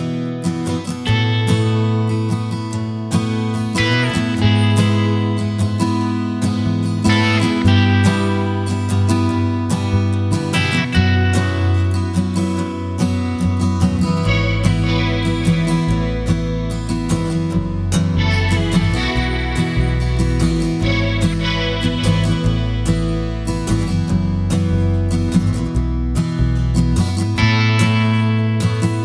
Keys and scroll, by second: 4.1-5.3 typing, 12.7-14.9 typing, 16.6 typing.